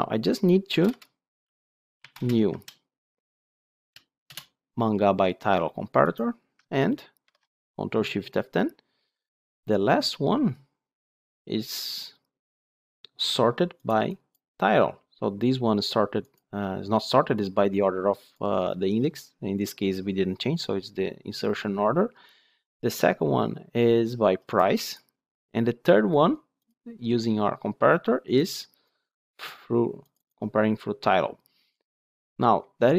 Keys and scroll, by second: 4.2 Return, 7.1 ctrl+shift+F10.